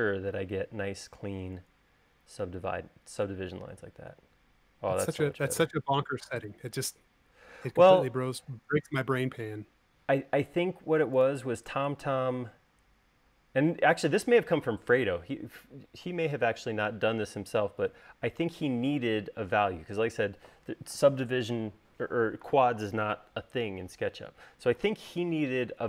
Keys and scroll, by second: 1.0 space.